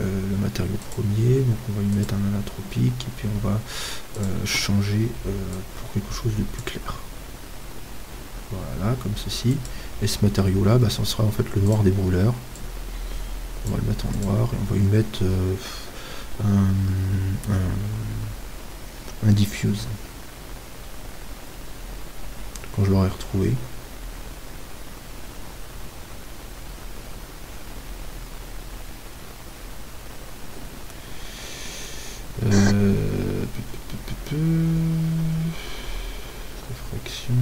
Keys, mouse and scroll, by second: 1.4-2.7 drag, 12.9 click, 15.7 click.